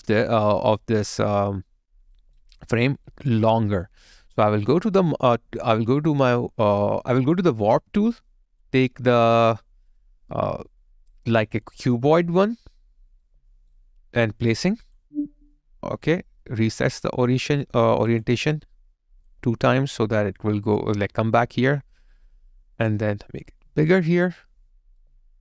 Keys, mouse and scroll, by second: 2.6 alt+click, 11.1 alt+right click, 11.7 alt+click, 13.2 alt+right click, 19.3 alt+click, 25.0 alt+right click.